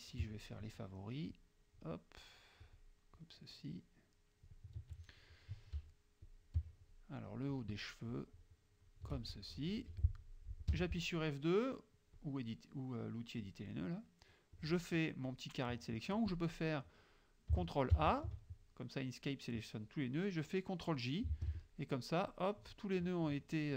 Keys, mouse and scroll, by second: 1.4 shift+click, 2.4 shift+click, 3.2-4.7 shift+drag, 6.3 shift+click, 7.4 shift+click, 8.2 shift+click, 10.0 F2, 10.8 F2, 12.2 click, 13.4 click, 14.6 click, 16.4 click, 18.0 ctrl+a, 21.4 shift+j, 21.6 shift+click.